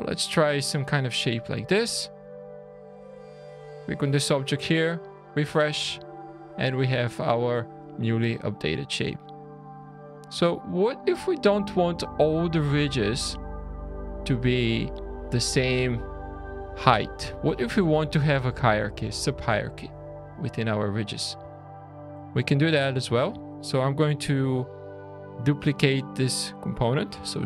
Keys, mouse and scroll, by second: 0.3 middle click, 1.0-1.4 scroll down 2, 1.5 Tab, 1.8 click, 4.7 click, 5.8 alt+a, 6.1 scroll up 4, 6.6 scroll down 2, 7.0 shift+middle click, 16.7-17.4 scroll up 6, 19.3-20.4 scroll down 9, 20.5 middle click, 20.9 scroll down 1, 21.5 shift+middle click, 22.1-22.8 shift+scroll down 1, 22.8 click, 24.4 `, 25.5 scroll down 2, 25.8 middle click, 26.7 middle click, 27.3 shift+d.